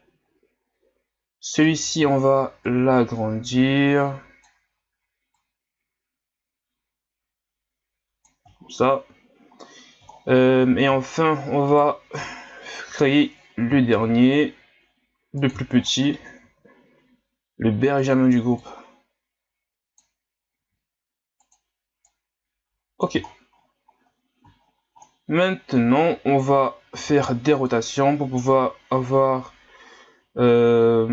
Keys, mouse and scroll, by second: 1.6 right click, 2.0 b, 5.3-8.6 drag, 8.6 shift+scroll up 6, 10.1 shift+scroll down 1, 11.0 scroll up 3, 11.7 right click, 12.9 l, 13.9 shift+d, 15.7 shift+scroll up 7, 16.4 s, 18.6-20.6 drag, 20.6 s, 22.1-23.3 drag, 23.3-24.0 scroll down 14, 24.6-25.6 scroll up 20, 26.9 r.